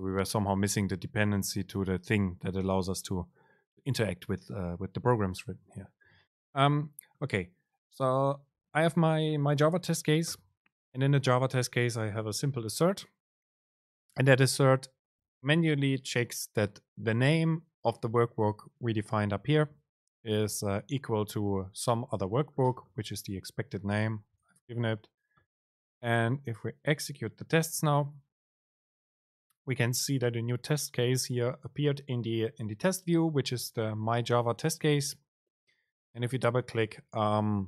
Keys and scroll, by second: 24.5 super+r.